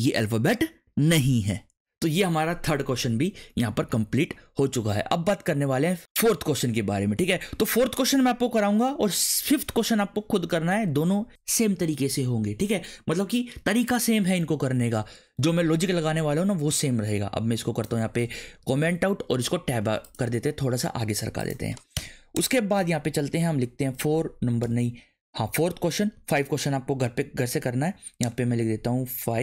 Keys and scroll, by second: 18.6 ctrl+/, 19.3 Tab, 21.9 Return, 22.3 BackSpace, 22.7 Return, 23.8 4, 24.6 BackSpace, 25.4 4, 26.1 ctrl+/, 26.9 Return, 29.2 5.